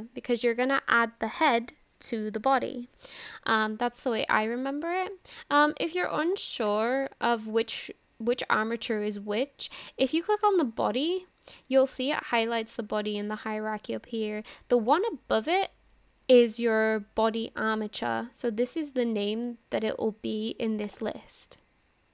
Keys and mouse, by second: 6.3 click, 6.7 click, 10.4 click, 21.0-22.1 drag.